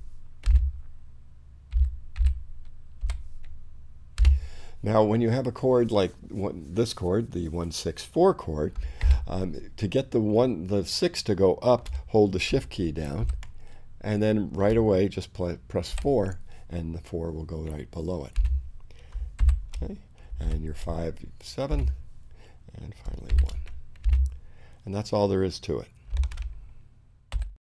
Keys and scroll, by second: 0.5 space, 1.8 i, 3.1 6, 4.3 space, 9.1 shift+i, 13.3 shift+6, 16.0 4, 18.4 space, 19.2 shift+space, 19.5 shift+v, 20.5 shift+7, 21.8 shift+space, 23.4 shift+i, 24.1 shift+space, 24.6 space.